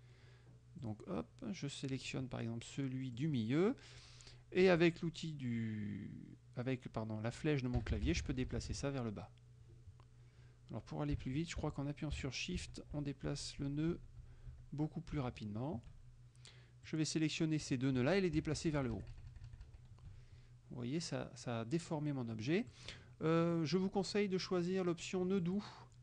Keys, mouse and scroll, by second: 0.9 click, 3.2 click, 4.8 Down, 7.9 Down, 11.7 shift+Down, 16.9-17.9 drag, 18.4 shift+Up, 22.8-23.8 drag, 25.5 click.